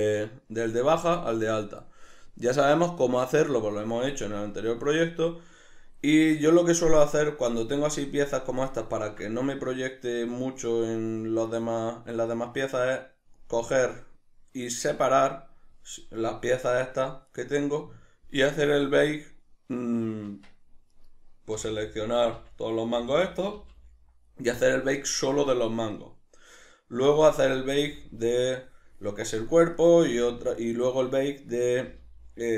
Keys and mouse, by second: 2.7 click, 8.8 middle drag, 10.9 click, 12.3 right click, 16.0-17.2 middle drag, 17.2 right click, 18.7 right click, 20.2 Tab, 20.9 right click, 21.5 l, 27.3 right click, 27.9 l, 29.7 right click, 30.1 l, 31.5 right click, 31.9 l.